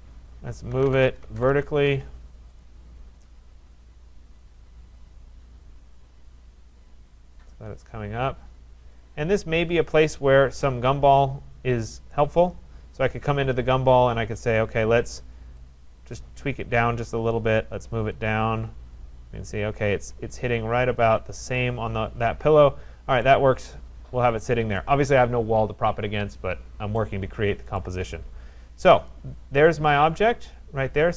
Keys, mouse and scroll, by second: 0.5-1.9 typing, 2.6 click, 7.4 click, 9.7 click, 10.2-10.7 scroll, 12.1 right click, 13.3 click, 13.8-14.2 scroll, 16.6 click, 19.9 click, 21.5 click, 22.6-23.3 scroll, 23.3 scroll, 23.9 scroll down 4, 24.8 right click, 27.9 right click, 28.1-28.8 scroll, 30.4 middle click.